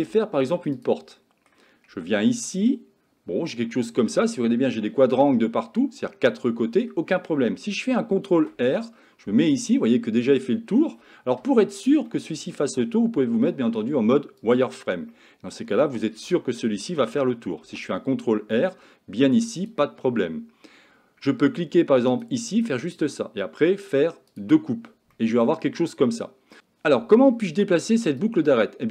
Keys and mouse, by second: 0.2-0.5 shift+middle drag, 1.2 middle click, 2.0 Tab, 2.3-4.1 middle drag, 4.8-6.9 middle drag, 8.4 ctrl+r, 12.1 middle click, 13.3 z, 15.1 middle click, 16.2 a, 17.7 ctrl+r, 24.3 click, 25.2-26.6 middle drag, 28.3-28.9 drag.